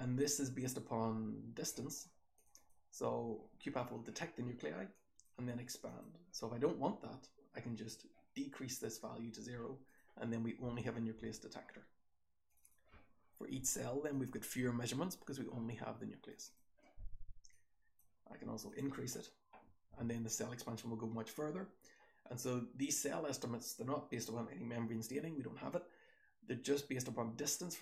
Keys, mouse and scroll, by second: 0.2-1.6 scroll down 1, 1.6-2.4 scroll down 1, 2.4 click, 2.4-4.8 scroll down 2, 2.6 click, 4.8 scroll down 1, 9.8 click, 10.7 f, 11.2 f, 12.5 click, 12.6 click, 16.3 click, 16.5 click.